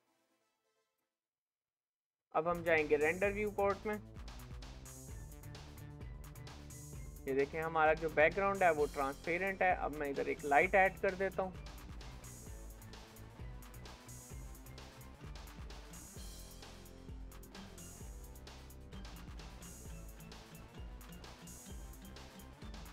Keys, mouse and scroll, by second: 0.4-2.7 scroll up 1, 2.7-3.3 scroll up 1, 3.3-5.5 scroll up 1, 5.5-6.0 scroll up 1, 6.0-8.7 scroll up 1, 8.7-9.9 scroll up 1, 9.9-10.4 scroll up 1, 10.4-13.5 scroll up 1, 13.5-14.5 scroll up 1, 14.5-16.6 scroll up 1, 16.6-18.5 scroll up 1, 18.5-19.3 scroll up 1, 19.3-21.4 scroll up 1, 21.4-22.9 scroll up 1.